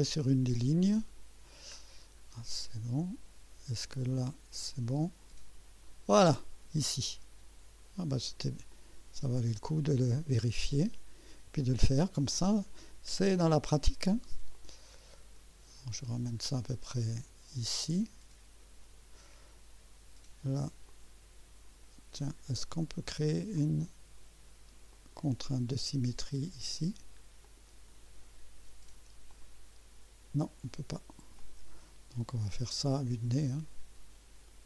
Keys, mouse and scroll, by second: 1.7-2.2 scroll down 2, 2.3 right click, 2.7 right click, 5.0-6.7 drag, 8.7 click, 10.0 click, 12.2 click, 14.5-19.3 drag, 20.9-21.9 drag, 23.6 click, 24.9 click, 26.3 scroll down 2, 27.4 click, 29.3 click, 31.4 click, 32.7-34.6 drag.